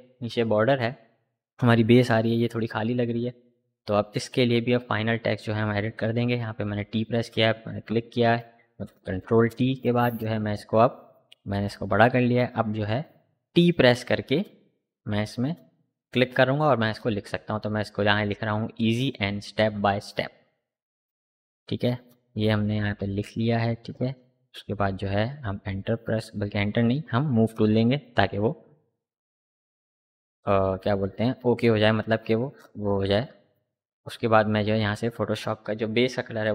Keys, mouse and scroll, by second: 2.3 click, 4.6 t, 5.3 click, 7.6 ctrl+t, 8.9-12.4 alt+drag, 12.4 t, 12.8 click, 13.1 ctrl+a, 14.1-19.8 typing, 21.0-22.1 typing, 24.6-27.9 drag, 27.9 typing, 28.1 ctrl+t, 28.6-32.9 alt+drag, 34.0 click, 36.3 click.